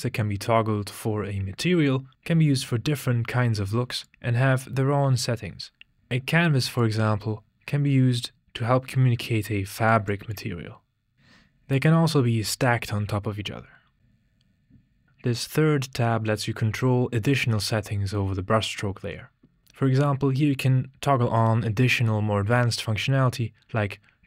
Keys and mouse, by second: 4.4-5.9 drag, 6.9-9.9 drag, 10.4 click, 11.3 click, 11.6 click, 12.4 click, 14.0 click.